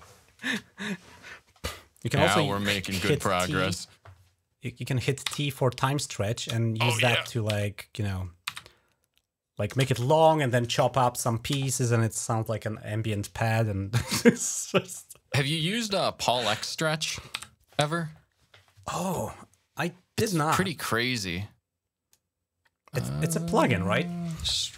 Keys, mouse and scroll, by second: 0.8 click, 1.7 scroll down 1, 2.8-3.4 shift+scroll down 3, 5.0 t, 6.4-6.8 shift+scroll up 2, 7.3-8.3 typing, 9.3 click, 10.1-10.7 scroll up 1, 12.0-13.7 ctrl+drag, 13.8 ctrl+click, 14.9-16.2 drag, 17.2 typing, 18.4-20.5 drag, 22.7 click, 24.1 click.